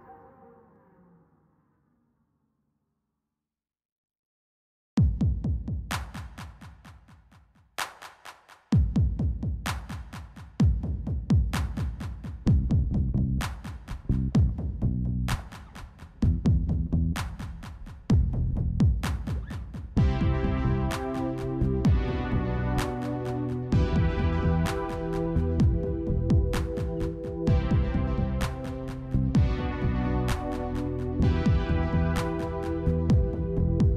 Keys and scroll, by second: 27.6 alt+x.